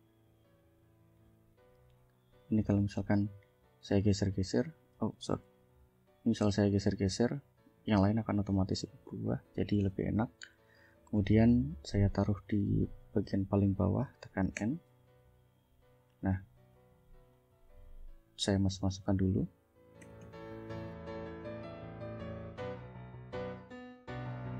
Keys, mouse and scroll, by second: 1.5 ctrl+s, 3.5 click, 4.5 ctrl+z, 5.6 ctrl+click, 6.0 ctrl+click, 6.6-8.7 ctrl+drag, 8.7 ctrl+z, 9.9 click, 11.4 click, 14.6 End, 16.7 ctrl+click, 17.6 ctrl+click, 18.2 click, 19.3 ctrl+shift+click, 20.0 ctrl+shift+Up, 20.2 ctrl+shift+Down, 21.3 ctrl+click, 21.8 ctrl+shift+click, 22.2 ctrl+shift+Up, 22.4 ctrl+shift+Down, 23.2 click, 23.5 ctrl+shift+click, 24.0 ctrl+shift+Up, 24.1 ctrl+shift+Down.